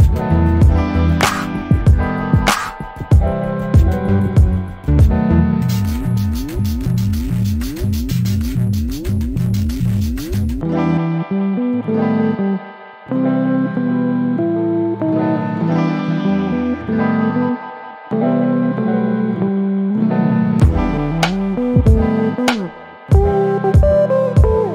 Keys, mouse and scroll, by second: 1.5 click, 4.5 0, 4.8 Return, 5.9 click, 6.2-6.8 scroll down 1, 6.9 middle click, 7.5 alt+click, 7.9 alt+middle click, 8.2 alt+click, 10.2 alt+middle click, 10.5 alt+click, 12.2 scroll up 1, 12.5 click, 13.2 middle click, 14.3-15.0 scroll up 1, 15.0 right click, 15.4 click, 16.3 alt+middle click, 18.2 click.